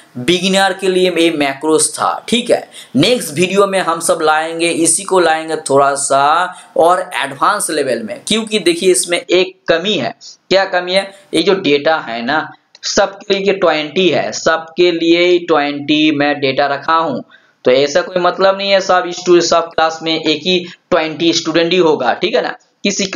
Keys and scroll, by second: 11.3 ctrl+Down, 20.4 ctrl+Down.